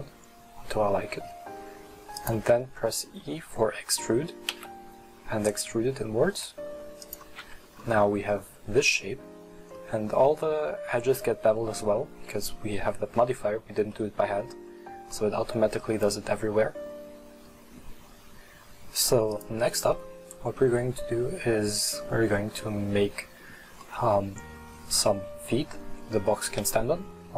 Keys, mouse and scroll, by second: 2.5-4.6 middle drag, 4.6 e, 7.6 Tab, 8.0 scroll up 1, 8.1-8.5 middle drag, 8.5-8.8 scroll down 1, 8.8-9.6 middle drag, 9.6 scroll up 1, 9.8-13.5 middle drag, 13.9-15.7 middle drag, 15.7 scroll down 1, 16.0-19.4 middle drag, 19.4 click, 20.0-23.8 middle drag, 23.9-26.5 middle drag, 26.5 KP_1.